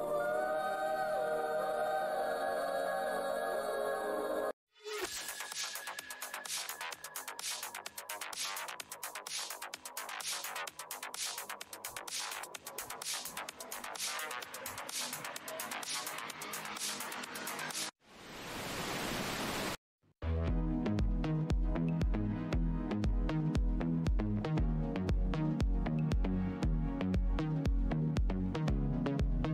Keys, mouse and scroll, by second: 0.9-1.5 scroll down 1, 2.8-3.4 scroll down 1, 4.4 click, 4.9-5.5 scroll down 1, 7.5-8.1 scroll down 1, 8.1 Tab, 8.2-8.7 scroll down 1, 9.3-9.9 scroll up 1, 11.2 click, 13.8 click, 14.8 Tab, 14.9-15.6 scroll down 1, 15.6 Tab, 15.9-16.8 scroll down 1, 16.8 Tab, 17.8 click, 19.6 click, 20.8 click, 23.1-23.6 scroll down 1, 24.6 Tab, 26.9 click, 27.2 Tab, 27.8 alt+Tab, 27.8 alt+scroll up 1, 29.4 Tab.